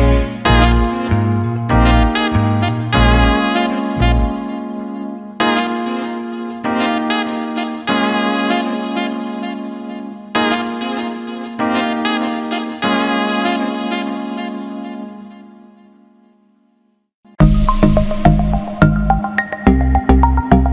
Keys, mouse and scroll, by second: 0.1 alt+middle click, 0.9 click, 2.0 alt+middle click, 2.7-4.7 drag, 4.8 alt+middle click, 5.9-7.1 drag, 7.7 click, 9.0-10.0 drag, 10.7 click, 11.5 click, 12.7 click, 13.5-14.5 drag, 14.6-15.3 alt+middle drag, 15.9 ctrl+z, 16.3 middle click, 17.3 click, 18.3-18.6 alt+middle drag.